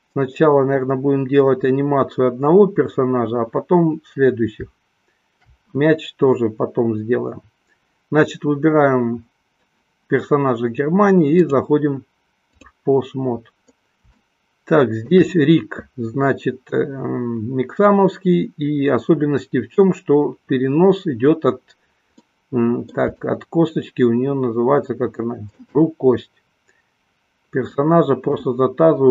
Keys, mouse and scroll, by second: 11.3-12.9 drag, 14.6 shift+middle click, 22.3-26.2 middle drag, 27.9 middle click.